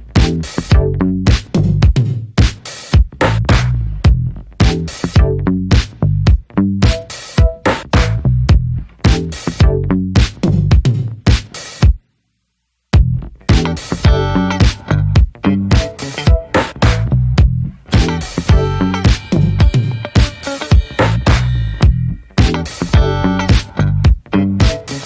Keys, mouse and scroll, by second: 0.6 alt+middle click, 0.9-1.5 scroll up 5, 1.1 shift+middle click, 1.5-3.2 middle drag, 3.2 scroll down 2, 3.5 middle click, 4.0 ctrl+z, 4.4-5.7 scroll up 3, 6.1-6.6 scroll down 4, 6.2 middle click, 6.6 middle click, 6.7 scroll up 1, 6.9 scroll down 3, 7.1 shift+middle click, 7.2 scroll up 1, 7.3-7.9 scroll down 4, 7.5 middle click, 7.9 shift+middle click, 8.1-9.8 scroll up 7, 8.3 shift+middle click, 8.9 middle click, 9.1 shift+middle click, 9.5 shift+middle click, 9.9 alt+middle click, 11.7-14.5 drag, 14.5 ctrl+z, 15.0 click, 15.3 scroll down 1, 15.4 middle click, 15.7-16.6 scroll up 6, 15.9 shift+middle click, 16.6-18.3 shift+middle drag, 18.3 click, 18.5 scroll down 3, 18.7 middle click, 18.9 ctrl+z, 19.0-19.4 scroll up 1, 19.6-20.9 shift+middle drag, 20.9 click, 21.4 ctrl+z, 21.5-21.9 scroll down 13, 21.9 shift+middle click, 22.0 scroll up 1, 22.2 middle click, 22.4 scroll down 2, 22.5-23.6 shift+middle drag, 23.6-25.0 drag.